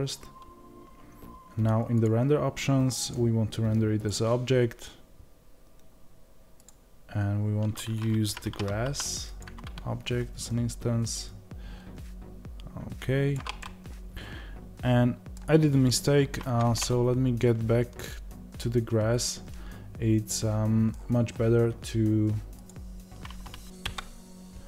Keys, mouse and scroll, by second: 4.0-13.5 drag, 13.5-23.7 middle drag, 16.3 Tab, 23.7 KP_Divide.